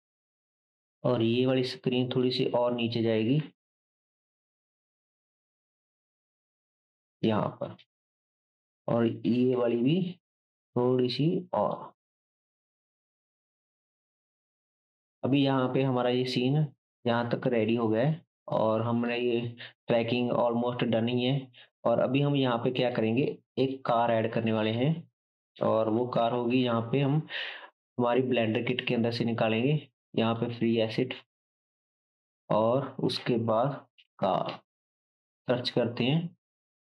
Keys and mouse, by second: 0.1 Tab, 0.8-7.1 drag, 0.8-13.9 middle drag, 0.8-13.9 right drag, 3.4 g, 8.1-11.8 drag, 9.3 g, 12.8-13.9 drag, 13.9 g, 15.1 ctrl+s, 22.6-26.4 drag, 22.6-26.4 middle drag, 22.6-26.4 right drag, 26.6-32.6 drag, 26.6-32.0 middle drag, 26.6-32.0 right drag.